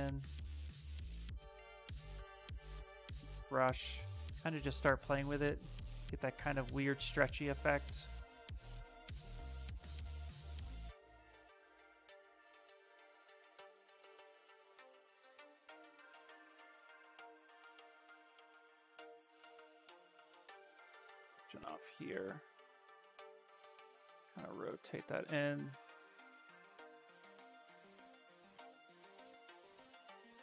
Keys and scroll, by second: 1.6-2.7 typing, 13.3 s, 17.9 s, 21.2 w, 27.2 q, 29.3 s.